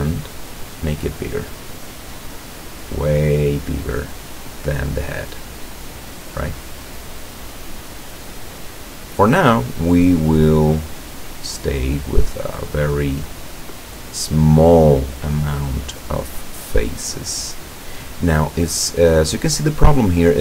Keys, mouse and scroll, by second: 7.0 scroll up 2, 7.0 middle click, 8.2 right click, 8.6-9.8 middle drag, 9.9 scroll down 1, 11.2-15.2 drag, 15.5 middle click, 16.5 right click, 17.1-20.4 middle drag.